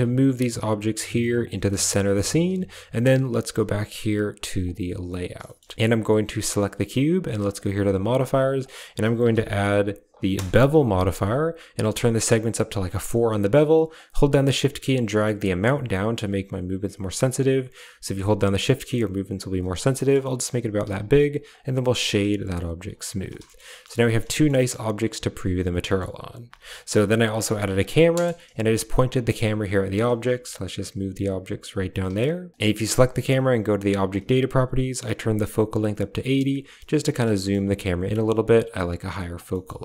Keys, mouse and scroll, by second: 1.5 shift+middle click, 2.0 shift+middle click, 2.4 a, 4.5 click, 5.3 click, 5.5 drag, 7.3 click, 7.9 click, 8.4-10.2 drag, 12.0 click, 12.3 click, 13.9-19.4 shift+drag, 19.9 middle drag, 20.1 middle click, 20.3 click, 20.7 w, 21.7 middle click, 22.5 shift+click, 23.6 middle click, 23.7 a, 23.9 middle drag, 24.4 click, 25.8 click, 26.3 alt+h, 26.7 a, 27.1 drag, 27.3 g, 28.0 KP_0, 29.1 drag, 29.8 shift+click, 30.0 g, 31.5-31.9 typing, 33.3 click, 34.0 click, 37.3 shift+middle click, 38.0 click, 39.3 shift+middle drag.